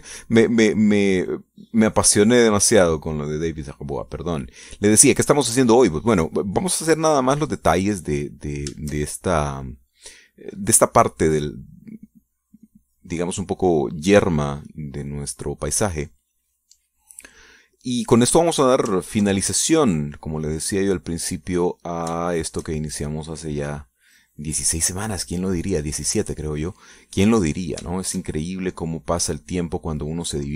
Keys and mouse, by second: 1.8-5.1 drag, 5.2 click, 5.8 middle click, 6.3 middle click, 7.7-9.4 drag, 9.5-17.6 shift+drag, 18.0 click, 19.7 ctrl+click, 20.7 click, 21.2 click, 22.0 click, 23.0-24.2 shift+drag, 24.2 click, 25.0 click, 25.9-27.0 drag, 27.4-29.0 drag, 29.1-30.5 shift+drag.